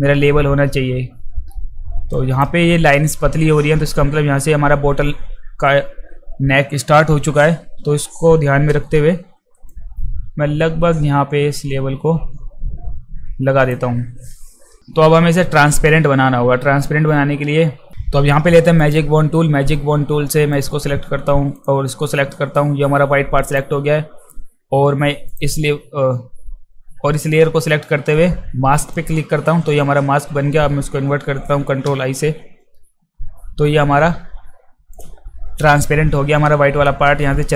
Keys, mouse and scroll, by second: 2.1 click, 7.6 q, 9.7 click, 14.7 z, 18.8 click, 20.5 click, 21.6 click, 28.8 click, 34.9 click.